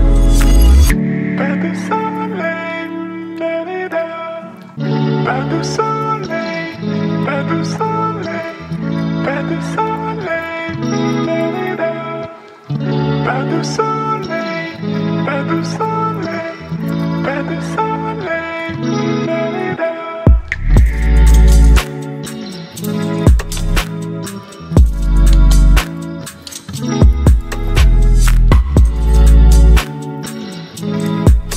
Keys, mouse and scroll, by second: 1.9 ctrl+0, 5.6 ctrl+0, 5.6 click, 6.9-9.3 typing, 10.5 Return, 12.0 click, 15.3-22.9 drag, 22.9-27.8 alt+drag, 27.8-31.5 alt+drag.